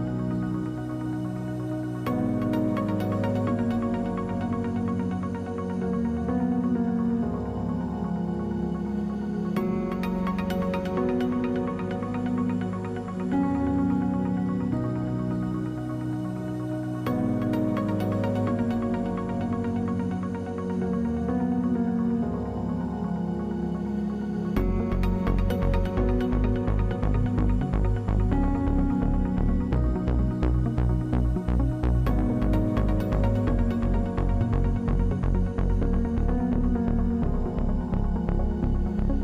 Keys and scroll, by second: 7.6 w, 11.5 space, 13.7 space, 24.7 Delete, 29.6 space, 30.7 space, 34.1 space, 35.0 space, 37.3 ctrl+space.